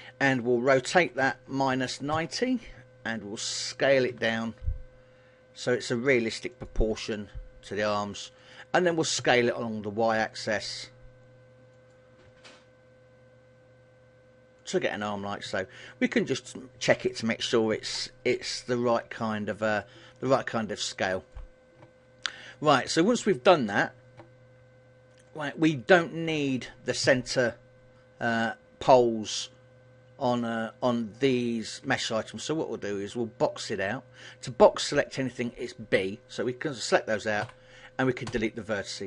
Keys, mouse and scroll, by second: 1.2 r, 4.2 s, 6.8 click, 7.0 g, 8.7 click, 10.0 s, 12.0 click, 12.4 g, 14.8 click, 15.6 KP_1, 18.5 g, 20.0 click, 20.4 scroll up 2, 20.9 shift+middle click, 24.7 g, 25.6 click, 27.1 a, 31.9 b, 37.6 Delete.